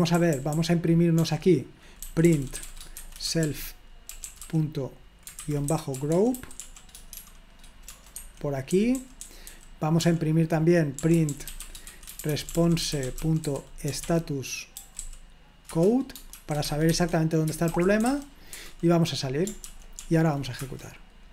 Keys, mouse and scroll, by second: 0.0-18.7 typing, 8.2 Escape, 15.7 Return, 19.6 ctrl+p, 20.0 ctrl+p, 20.6 Return.